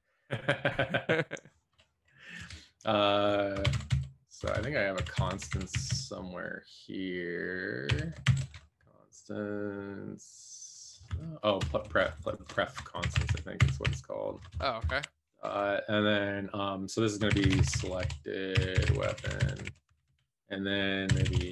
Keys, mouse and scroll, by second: 2.9 Escape, 3.7-6.2 typing, 8.4 ctrl+., 11.6 BackSpace, 12.8-15.0 typing, 14.7 shift+Return, 17.2-21.5 typing, 20.0 Escape.